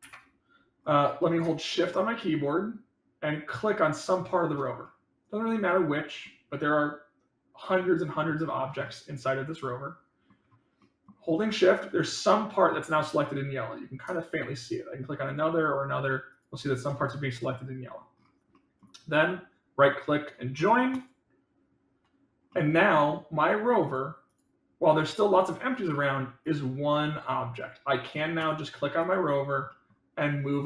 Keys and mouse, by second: 4.8-6.2 middle drag, 8.8-10.2 middle drag, 10.7 middle click, 12.6-12.9 middle drag, 14.6 shift+click, 15.2 shift+click, 17.0 middle click, 18.5 middle click, 22.5-23.0 middle drag, 23.8 click, 24.2 click, 26.3-28.1 drag, 29.6 middle click, 30.5-30.6 drag.